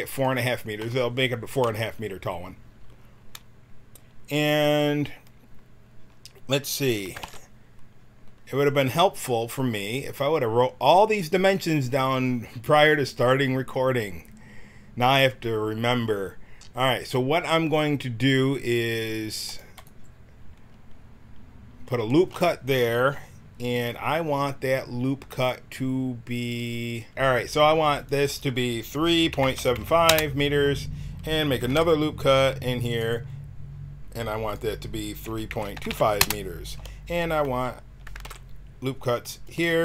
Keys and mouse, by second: 7.2 ctrl+r, 20.6-22.0 drag, 22.0-24.7 right drag, 27.1 Tab, 31.7 ctrl+r, 33.0-37.1 drag, 38.2 ctrl+r.